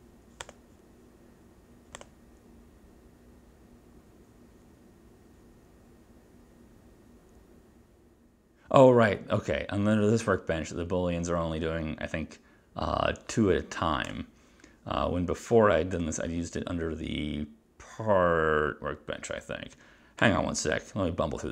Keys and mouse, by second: 0.5 click, 2.1 click, 16.0 click, 20.0 click.